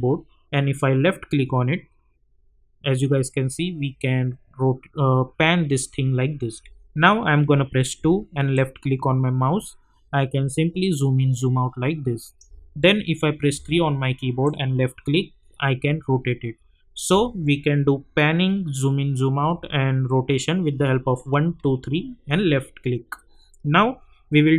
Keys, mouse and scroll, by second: 0.0-6.9 typing, 0.7 click, 8.0-17.2 typing, 14.4 click.